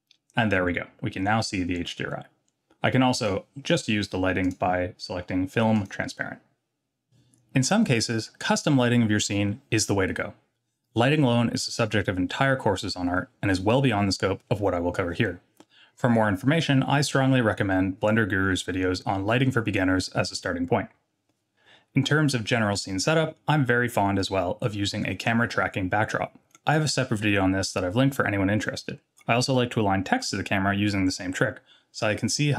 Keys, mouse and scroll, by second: 3.2 click, 4.4 click, 5.7 click.